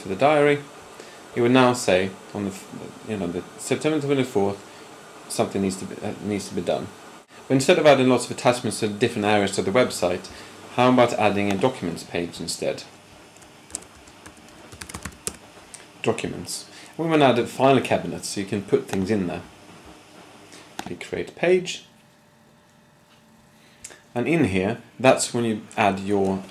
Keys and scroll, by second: 13.7-15.2 typing.